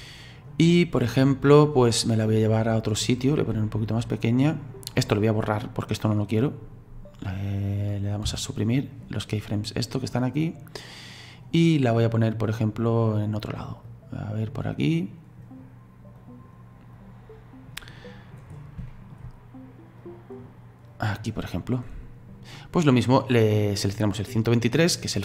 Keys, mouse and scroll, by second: 0.7-3.5 middle drag, 3.5 s, 8.3 Delete, 10.1-17.0 drag, 18.0 middle click, 18.5-18.9 scroll up 3, 18.9-20.0 shift+middle drag, 20.0-23.9 drag.